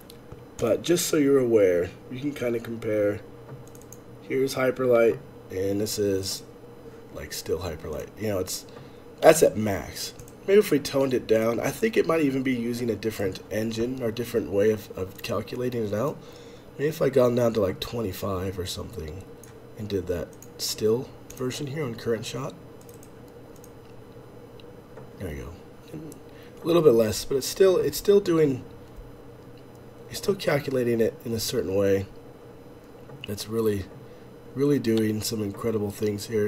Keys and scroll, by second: 13.4 F11, 13.4 F8, 24.1 Escape, 24.1 space.